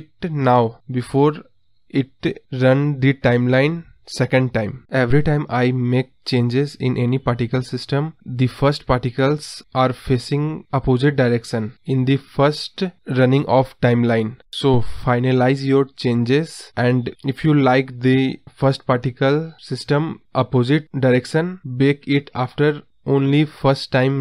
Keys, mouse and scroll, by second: 3.2 space, 3.6 space, 4.8 space, 10.7-12.0 drag, 16.5 KP_0, 17.5 click, 18.1 space, 19.3 scroll up 3, 19.6-20.5 scroll down 4, 20.5 scroll down 1, 20.7-21.3 scroll up 3, 21.4 space, 21.6 space.